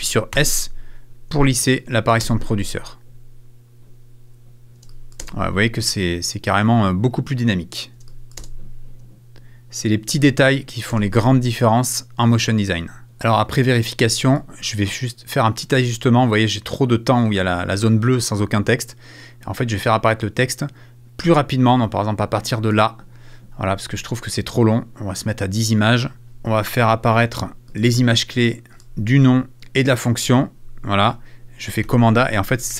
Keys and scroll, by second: 4.9 space, 7.9 space, 10.1 space, 26.2 super+f, 30.6 super+f.